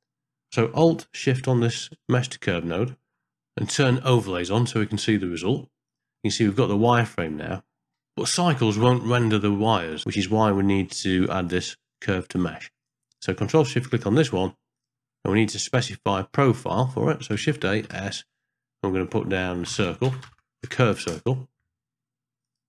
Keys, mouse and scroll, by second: 2.3 alt+shift+click, 3.9 middle click, 6.1-7.9 middle drag, 8.9 ctrl+middle click, 10.5 middle click, 10.8-11.4 scroll up 1, 11.4-12.8 drag, 13.8 alt+shift+click, 14.7 click, 16.4 middle click, 17.5 shift+a.